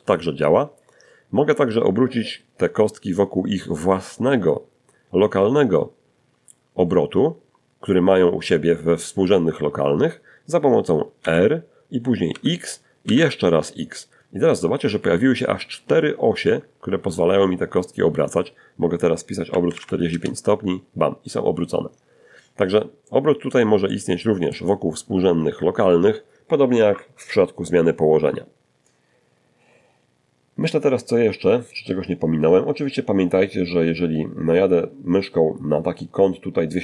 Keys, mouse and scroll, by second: 9.4 r, 10.5 x, 11.2 x, 17.6-18.5 typing, 21.2 middle click, 22.1 middle click, 36.5-36.8 ctrl+scroll up 1.